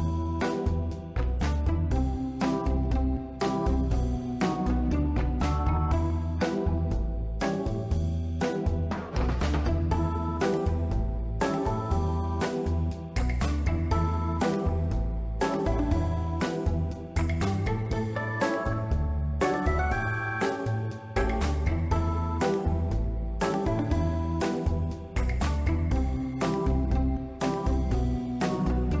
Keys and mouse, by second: 0.4 middle drag, 0.9 ctrl+middle click, 1.2-1.5 shift+middle drag, 1.6 ctrl+middle drag, 2.2-2.6 drag, 2.8 middle drag, 3.5 shift+middle click, 4.0-4.9 drag, 5.1 ctrl+middle drag, 5.5-5.9 middle drag, 6.2 ctrl+middle click, 6.6-7.5 middle drag, 8.0 middle click, 8.5-9.0 ctrl+middle drag, 9.0 ctrl+s, 9.4 ctrl+middle click, 10.5 middle click, 11.5-12.4 middle drag, 12.9-14.1 middle drag, 14.4-15.0 middle drag, 15.1 ctrl+middle click, 16.0-16.8 middle drag, 17.3 Tab, 18.0 3, 19.2 click, 20.1 alt+shift+click, 21.2 alt+shift+click, 22.7 shift+d, 22.8 shift+Return, 24.3 p, 27.0 Tab, 27.7-29.0 right drag.